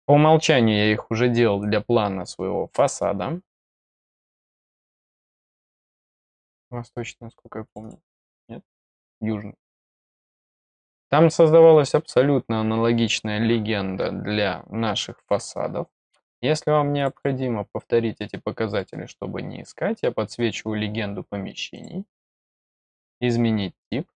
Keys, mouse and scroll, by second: 0.4-0.9 scroll down 1, 0.9-1.8 scroll up 4, 1.8-2.2 scroll up 1, 2.2 scroll, 2.4 scroll up 1, 2.7 middle click, 3.0 scroll up 1, 3.1 scroll, 3.6 click, 3.7 scroll up 1, 3.7 click, 3.8 scroll, 5.8 click, 6.0 click, 7.6 click, 7.8 click, 16.4 middle click, 16.9 click, 17.1 click, 18.7 click, 21.7 click.